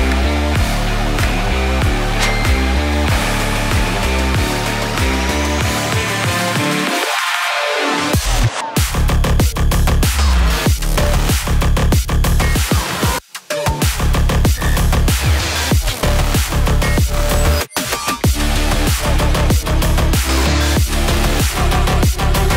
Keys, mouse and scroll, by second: 0.7-6.5 drag, 7.0-7.9 typing, 9.7 click, 12.4 scroll up 1, 13.4-14.8 drag, 14.8 middle click, 16.1 scroll up 1, 17.4 click, 18.0 scroll up 1, 19.1-21.4 drag, 21.4 middle click.